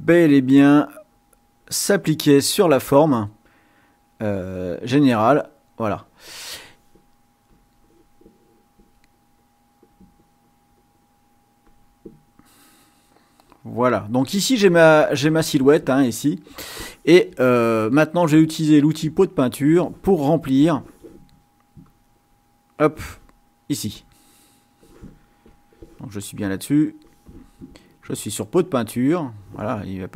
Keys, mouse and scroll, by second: 3.2-6.0 drag, 7.4 click, 9.7-12.0 drag, 12.4 middle click, 13.4-14.5 drag, 19.0 click, 21.9 click, 23.9 click, 25.4 click, 26.4 click, 28.2 click.